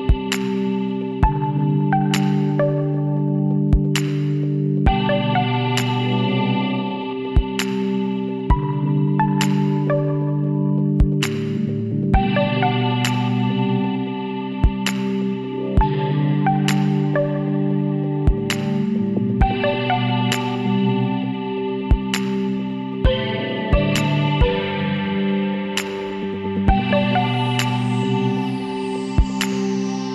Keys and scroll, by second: 8.9 Up, 9.2 Down, 15.4 Down, 15.8 Up, 16.2 Down, 16.5 Right, 20.6 ctrl+d, 21.2 ctrl+j, 22.0 ctrl+z, 26.4 Down, 26.6 v, 26.7 Down.